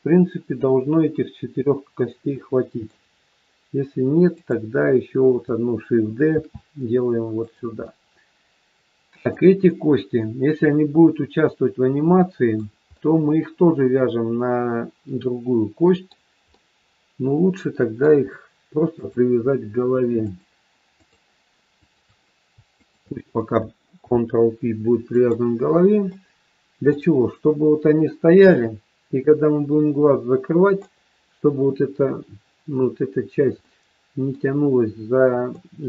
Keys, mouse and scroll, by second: 1.4 middle click, 4.2 click, 6.3 shift+d, 7.9 middle click, 9.5 scroll up 1, 9.7 middle click, 12.9 middle click, 16.4 middle click, 18.9 shift+click, 22.2 shift+click, 23.1 shift+click, 23.9 ctrl+p, 25.8 scroll down 1, 26.1 middle click, 28.5 middle click, 33.7 middle click, 35.4 middle click.